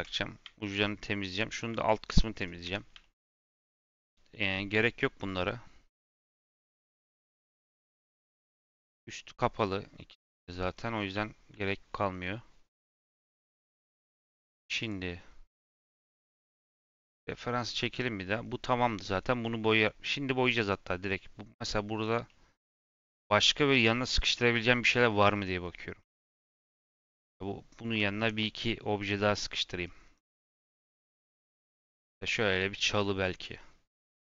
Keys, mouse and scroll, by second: 0.5 shift+middle click, 1.6 click, 2.0 x, 2.6 Tab, 2.9-6.0 shift+middle drag, 8.5 click, 10.6-11.1 scroll down 2, 11.1-14.1 shift+middle drag, 14.7 click.